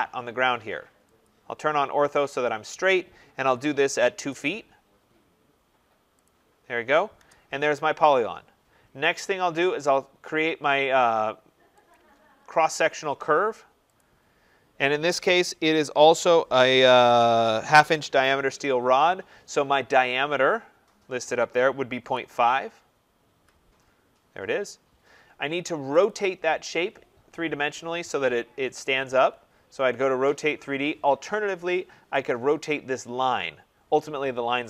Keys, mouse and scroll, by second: 1.2 click, 3.4-4.4 typing, 6.2 click, 7.1 Return, 7.6 middle click, 11.9 click, 12.6 middle click, 12.7 middle click, 12.7 middle click, 13.9 click, 21.8-22.5 typing, 23.2 Return, 24.7 middle click, 24.9 middle click, 26.0 click, 30.8 click, 31.2 Escape, 32.2 click, 32.6-34.3 scroll.